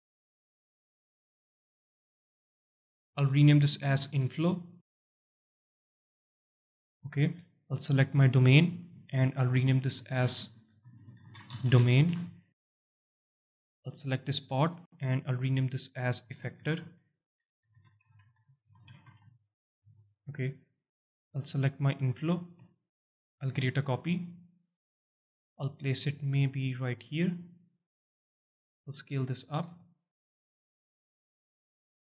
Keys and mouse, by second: 1.7 alt+shift+drag, 2.5 alt+shift+drag, 4.8 F2, 8.9 F2, 13.9 click, 14.9 F2, 17.1 e, 17.6 BackSpace, 20.1 click, 22.0 click, 22.6 alt+shift+middle drag, 23.5 shift+d, 27.5 click, 27.9 s, 29.7 s, 30.4 click, 31.0 shift+click, 31.9 g.